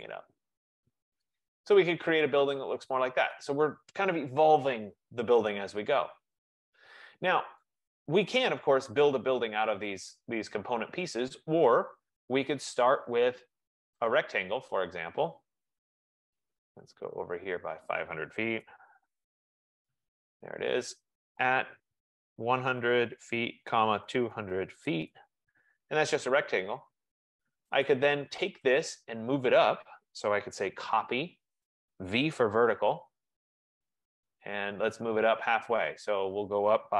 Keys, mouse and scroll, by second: 0.2 click, 0.9-1.5 scroll up 1, 3.4 right click, 5.9 middle click, 6.0 middle click, 7.7 right click, 8.6-9.6 scroll, 13.0 F15, 14.3 click, 18.5-19.7 typing, 21.5 shift+2, 22.6-25.2 typing, 30.6-33.7 typing, 31.2-32.5 drag, 35.3-36.0 typing, 35.7-36.9 drag.